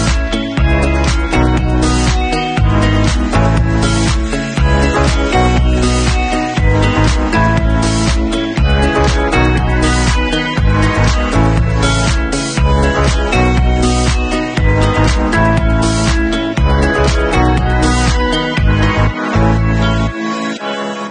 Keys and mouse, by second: 4.5 Tab, 8.7 click, 8.8 middle click, 9.5-16.9 drag, 13.8 alt+d, 16.9-21.1 middle drag, 18.0 alt+d, 20.7 alt+d.